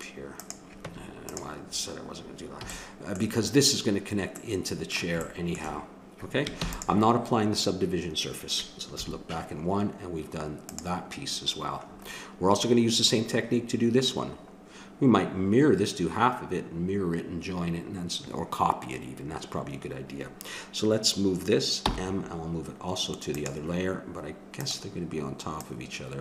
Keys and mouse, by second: 0.8 Tab, 2.6 a, 6.6 ctrl+s, 8.9 KP_1, 10.7-12.0 drag, 21.9 m, 24.5-26.2 drag.